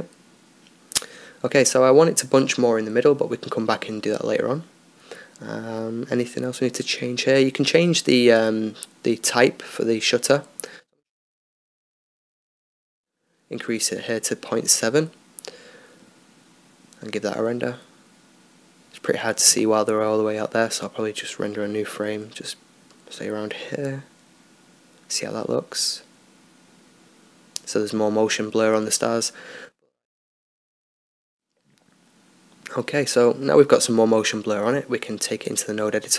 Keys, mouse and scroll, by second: 4.7 Escape, 6.1 middle click, 7.0 click, 7.6-10.1 middle drag, 10.1-11.2 drag, 11.2-13.5 middle drag, 12.0-14.1 drag, 16.3-18.2 middle drag, 18.1 click, 24.2-36.1 drag.